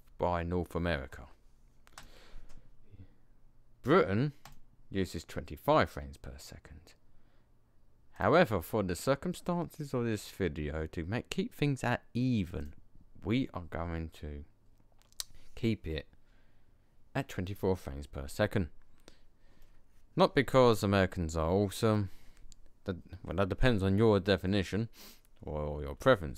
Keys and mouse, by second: 2.0-3.9 drag, 3.9 middle click, 8.1-10.0 middle drag, 19.6-20.4 middle drag.